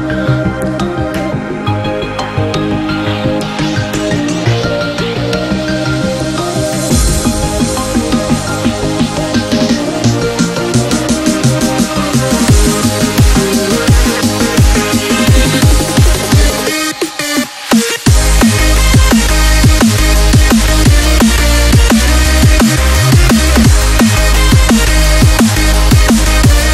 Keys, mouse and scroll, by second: 2.0-5.0 drag, 5.8-6.3 alt+shift+drag, 7.4 Up, 11.8 Right, 12.7 Left, 13.4 click, 14.3 ctrl+=, 16.3 click, 16.9 shift+Down, 18.2 Right, 20.9-21.7 alt+shift+click, 22.8 Right, 25.2-26.7 drag.